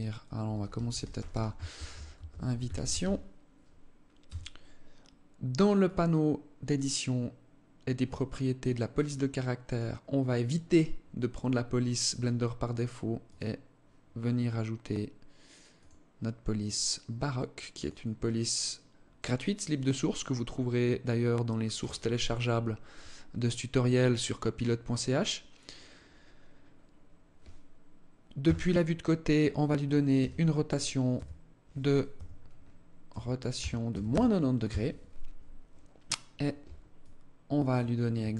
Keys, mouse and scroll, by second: 0.0-2.7 typing, 3.8 Tab, 5.4 click, 8.5 click, 12.8 click, 17.5 click, 26.1-27.8 scroll up 3, 27.9 KP_3, 29.7 r, 32.6 r, 36.5 alt+click, 37.7 alt+click.